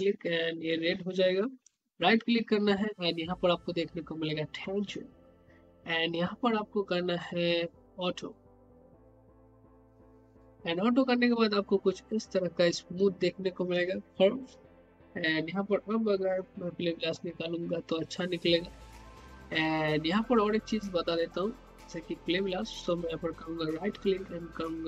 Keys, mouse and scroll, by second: 1.6 right click, 8.1 click, 10.3 click, 14.9 click, 22.8 right click.